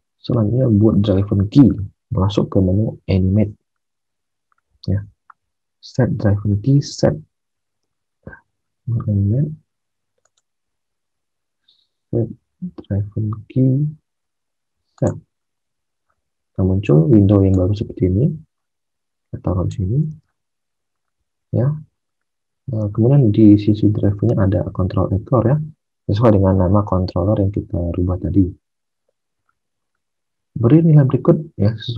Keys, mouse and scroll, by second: 7.8 alt+Tab, 20.1 alt+Tab, 22.8 alt+Tab, 28.3 alt+Tab.